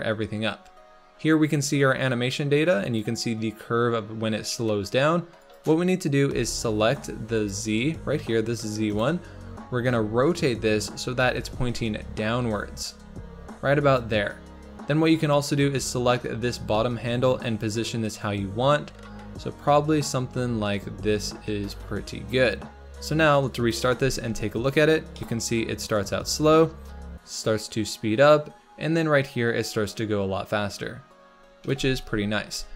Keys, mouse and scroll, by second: 6.9 click, 7.8 g, 9.8 r, 15.7 click, 16.5 g, 23.4 click, 23.9 space, 24.9 scroll up 2, 25.1-28.3 middle drag, 29.7-30.9 scroll down 1, 31.7 space, 32.6 g.